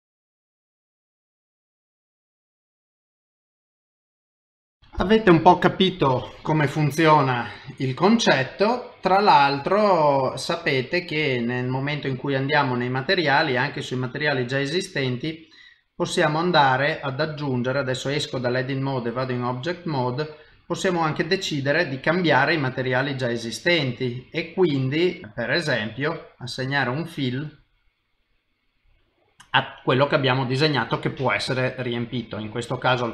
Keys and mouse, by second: 0.0-1.6 typing, 2.0 middle click, 2.6 middle click, 2.6 shift+middle click, 2.7 middle click, 3.7 middle click, 3.8 ctrl+middle click, 3.9 middle click, 4.0 shift+middle click, 4.1 middle click, 4.6 shift+middle click, 4.8 middle click, 4.8 shift+middle click, 6.5 middle click, 7.4 middle click, 9.1 middle click, 12.0 click, 14.4 click, 15.6 middle click, 17.5 ctrl+Tab, 19.1 middle click, 20.5 click, 20.9 click, 22.1 click, 24.6 click, 28.5 middle click, 30.3 middle click.